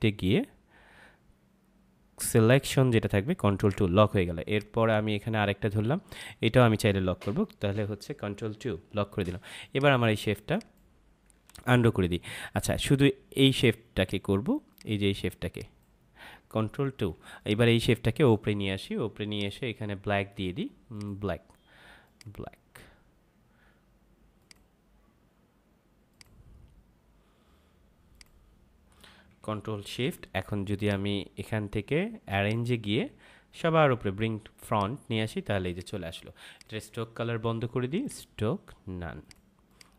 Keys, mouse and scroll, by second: 3.6 click, 8.4 ctrl+2, 9.6 click, 11.5 ctrl+z, 13.5 click, 16.8 ctrl+2, 17.3 click, 30.7 right click, 32.4 click.